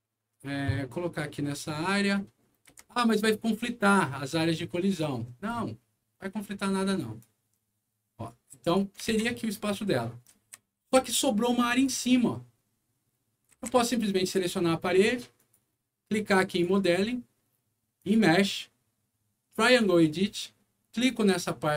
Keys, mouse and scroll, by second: 2.1-2.5 scroll up 2, 2.6 r, 3.5-4.9 drag, 5.2-5.6 scroll down 2, 7.1-8.7 drag, 9.0 alt+w, 9.6-11.0 alt+right drag, 10.5-11.4 typing, 11.6 click, 13.2-14.0 typing, 13.4 right click, 15.3 click, 16.4 click, 17.9 click, 19.6 click.